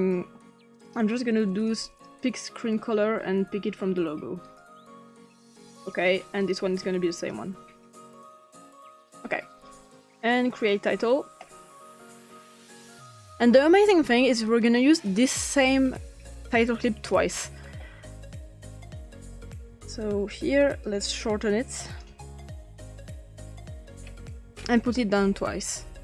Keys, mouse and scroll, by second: 1.7 click, 2.7 click, 4.5 click, 5.8 click, 6.4 click, 7.1 click, 8.7 click, 10.6 click, 12.3 click, 16.7-18.7 drag, 19.1-19.9 scroll down 1, 20.8-22.0 drag, 22.3 ctrl+c, 22.7 ctrl+v, 23.2 click, 24.0-24.8 ctrl+scroll up 1.